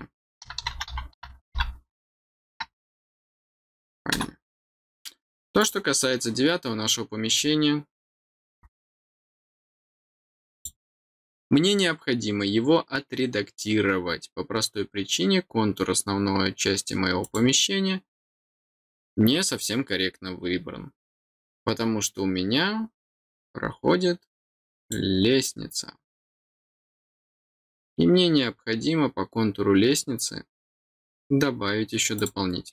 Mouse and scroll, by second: 5.6 click, 10.5 click, 17.2 click, 23.2 click, 24.8 click, 27.0 click, 32.1 click.